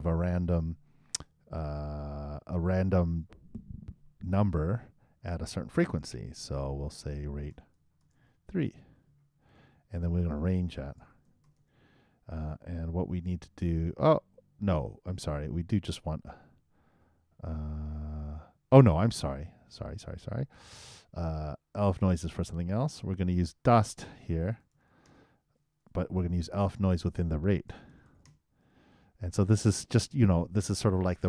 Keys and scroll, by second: 9.0 shift+3, 9.9 shift+., 12.5 shift+e, 24.4 shift+BackSpace, 24.6 shift+d, 27.7 shift+d.